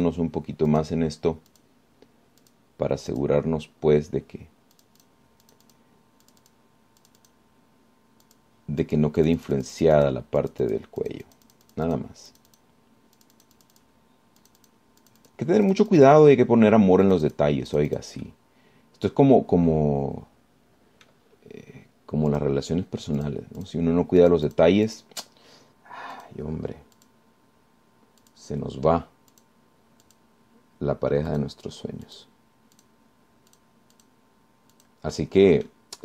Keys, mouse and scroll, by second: 0.2 click, 0.7 click, 1.2 click, 1.9 click, 2.7 click, 3.7 click, 4.3 click, 6.0 click, 6.7 click, 7.5 click, 8.3 click, 9.5 click, 10.1 click, 11.6 click, 12.2-13.4 drag, 13.5 click, 14.4 click, 15.7 click, 16.3 click, 16.9 click, 18.3 click, 18.9 click, 19.5-22.5 middle drag, 23.5 click, 24.4 click, 24.8 click, 25.5 click, 26.1 click, 27.4 click, 28.2 click, 29.5 click, 30.5 click, 31.3 click, 32.5 click, 33.3 click, 34.0 click, 34.7 click, 35.2 click, 35.9 click.